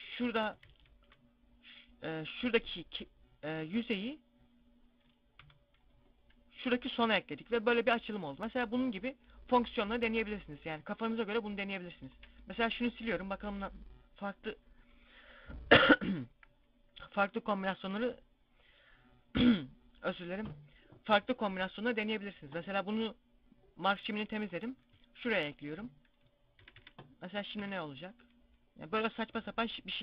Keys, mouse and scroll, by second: 0.5 ctrl+z, 5.3 u, 10.5 z, 12.0 shift+right click, 12.5 right click, 13.3 ctrl+e, 24.3 right click, 25.2 ctrl+e, 26.5 a, 26.7 a, 27.5 u, 28.8-29.2 scroll up 3, 29.2 scroll down 3.